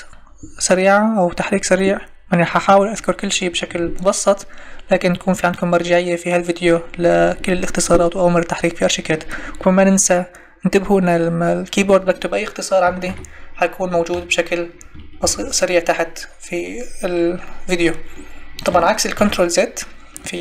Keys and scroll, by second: 13.0 ctrl+z, 19.1 ctrl+z.